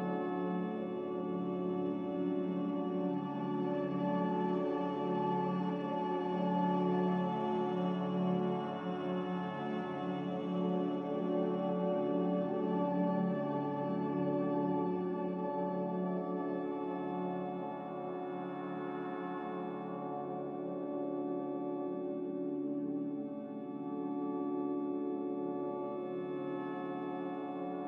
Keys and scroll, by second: 2.0 e, 13.3 a, 14.9 g, 17.1 z, 18.5 a, 20.1 Delete, 21.6 z, 22.9-23.7 typing, 27.3-27.8 typing.